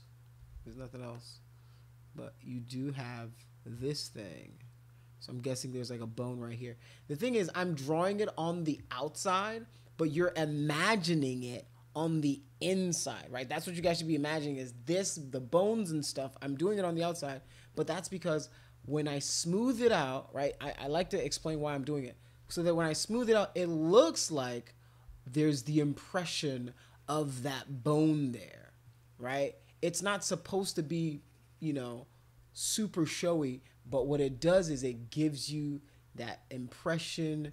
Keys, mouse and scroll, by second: 0.6 ctrl+z, 1.1 click, 2.1 click, 3.9 click, 4.1 click, 5.1 click, 5.7 click, 5.9 click, 6.1 click, 19.3 click, 20.5-21.5 typing, 22.5 click, 23.6 click, 25.3-32.0 shift+drag, 34.0-34.7 typing, 36.6 click.